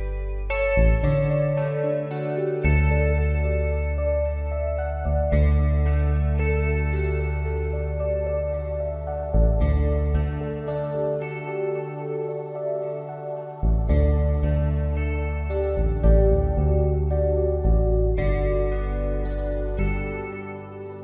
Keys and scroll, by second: 5.9 l, 8.8 ctrl+j, 9.3 v, 9.8 space, 10.1 ctrl+t, 10.5 Return, 11.3 ctrl+t, 11.9 Return, 12.9 Up, 13.2 ctrl+t, 14.0 Return, 15.0 ctrl+t, 18.6 Return, 18.7-21.0 typing.